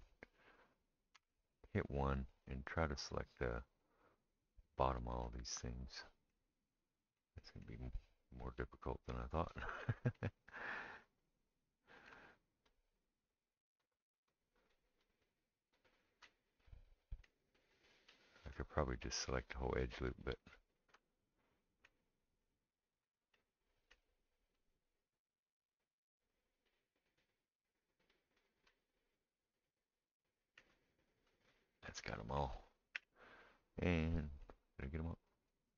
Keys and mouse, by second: 1.1 1, 4.1-35.7 drag, 32.9 KP_1.